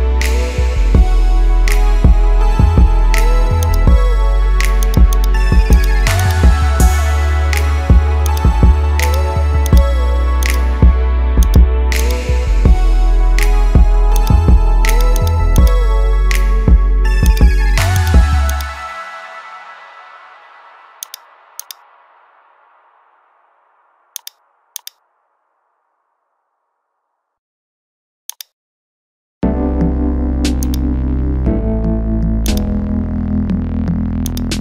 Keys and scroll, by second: 6.8 ctrl++, 12.8 ctrl+0, 20.4 ctrl+alt+2, 27.7 ctrl++.